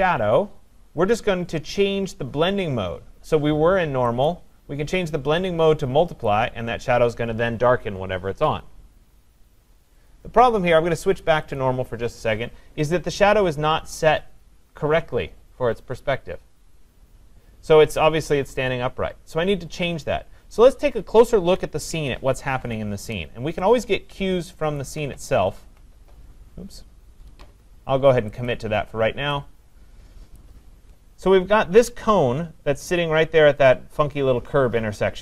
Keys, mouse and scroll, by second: 4.9 click, 6.4 click, 10.7 click, 11.5 click, 21.6 click, 21.9 ctrl+=, 22.5 ctrl+=, 24.8 alt+click, 28.5 click, 30.3 click.